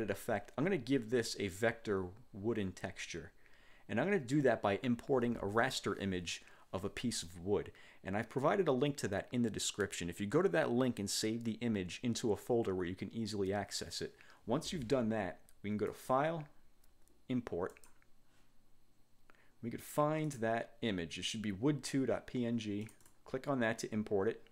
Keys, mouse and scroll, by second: 16.0 click, 17.8 click, 20.3 click, 22.9 click.